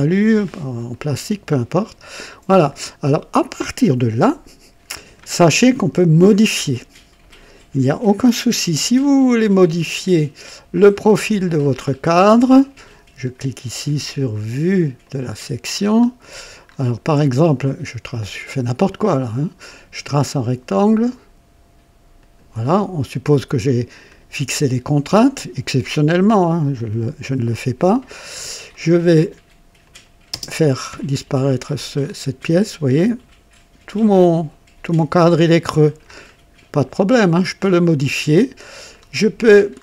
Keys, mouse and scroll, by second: 0.4 scroll up 1, 0.9 right click, 1.4 click, 2.5 scroll down 1, 3.4-5.3 drag, 9.7 click, 10.7 click, 11.8-12.1 scroll up 2, 12.3 right click, 15.0 click, 15.7-16.1 scroll up 2, 16.6 scroll up 2, 17.0 right click, 18.8 click, 20.2 click, 22.2 click, 26.7 click, 28.2-28.5 scroll up 2, 28.7 right click, 29.8 click, 30.3 space, 30.9 click, 32.0 scroll up 2, 32.5-36.2 drag, 33.5 typing, 36.2-36.6 scroll down 1, 38.2 space, 38.9-39.2 scroll down 2, 39.7 scroll down 2.